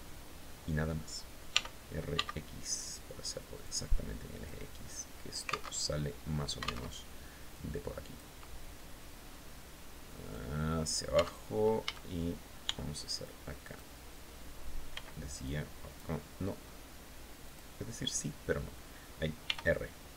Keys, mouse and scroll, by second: 0.9 r, 3.0 click, 3.9-5.2 drag, 5.2 alt+Tab, 6.3 alt+Tab, 7.0 click, 8.7 scroll up 1, 9.7 click, 10.6 Tab, 11.3 a, 12.1 b, 12.6 click, 14.3 b, 14.8 click, 16.9 click, 18.9 r, 19.8 Escape.